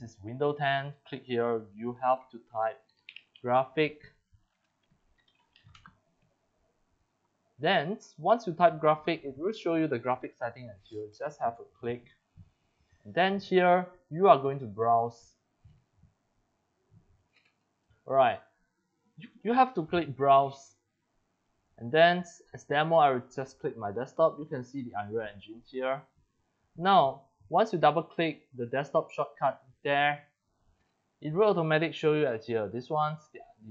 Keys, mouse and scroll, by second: 2.6-6.2 typing, 7.0 click, 7.5 click, 8.8-9.4 drag, 11.1 click, 13.0 click, 15.6 click, 17.2 click, 18.0-18.4 scroll down 3, 20.5 click, 22.8 click, 23.7 click, 24.5 click, 25.3 click, 25.5 click, 28.2 click, 31.9 scroll down 1, 32.3 scroll up 2, 32.6 scroll down 1.